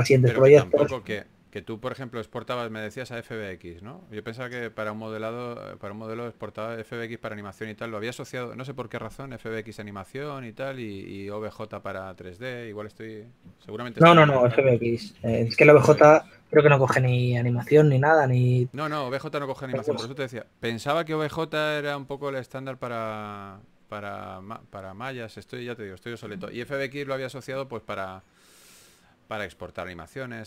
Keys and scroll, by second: 1.4 typing, 3.4 typing, 6.7 s, 11.0-11.7 typing, 14.8-16.5 typing, 21.9 s.